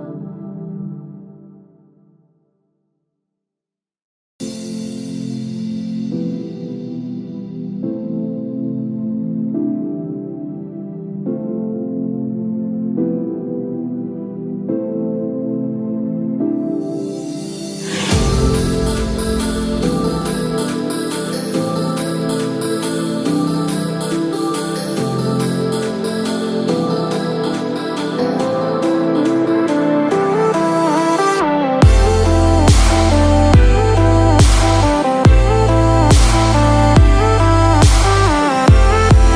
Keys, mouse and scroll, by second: 7.6 space, 8.3-8.6 scroll down 3, 10.2-10.6 scroll down 2, 11.0 scroll down 1, 14.7 shift+middle click, 15.6-16.1 scroll up 1, 16.4 shift+middle click, 23.1 KP_0.